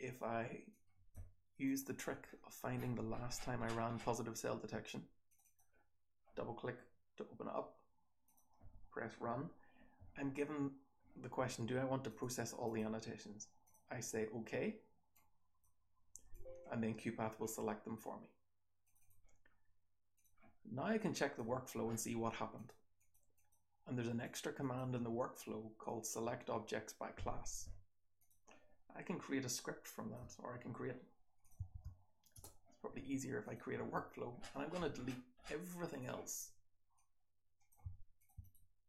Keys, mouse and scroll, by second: 2.2-3.2 scroll up 1, 3.2-5.2 scroll down 1, 5.2-5.5 scroll down 1, 5.2 click, 5.3 click, 18.8 click, 18.9 click, 21.7-22.5 scroll down 1, 22.5-24.1 scroll down 1, 22.5 click, 22.9 click, 23.3 click, 24.1 click, 24.1-27.8 scroll down 1, 24.5 click, 27.8-29.7 scroll down 1, 28.1 click, 33.4 click.